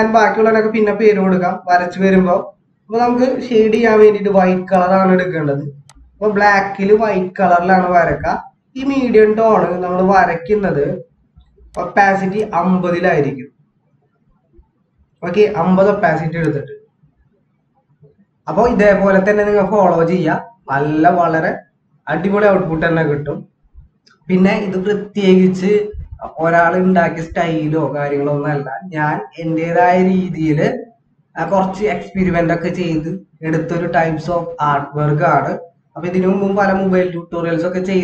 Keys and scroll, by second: 2.7 typing.